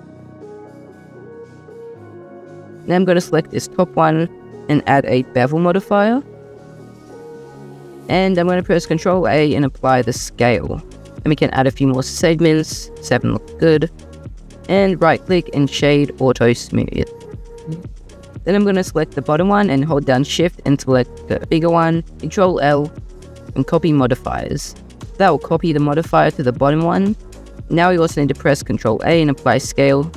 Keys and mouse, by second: 2.7 ctrl+a, 3.4 click, 4.1-7.1 drag, 9.1 ctrl+a, 10.1 typing, 11.6 click, 11.8 click, 11.9 click, 12.1 click, 14.6-16.3 drag, 19.1 click, 20.9 shift+click, 21.9 ctrl+l, 24.5-24.9 drag, 25.3 drag, 28.7 ctrl+a, 30.0 click.